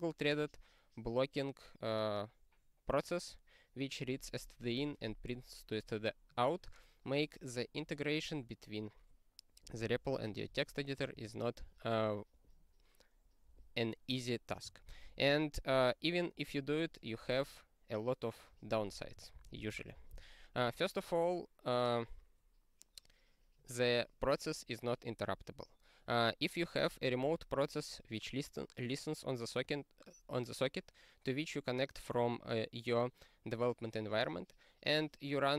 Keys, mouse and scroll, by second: 11.1 ctrl+n, 15.8-19.3 scroll down 46, 19.3 ctrl+n, 19.5 ctrl+n.